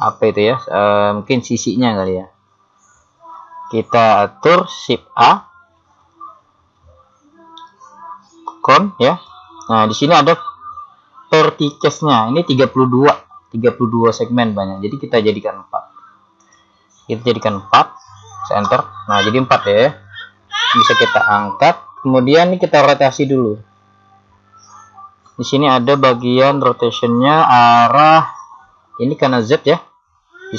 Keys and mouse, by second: 6.2 shift+a, 16.5 click, 24.0-28.5 middle drag.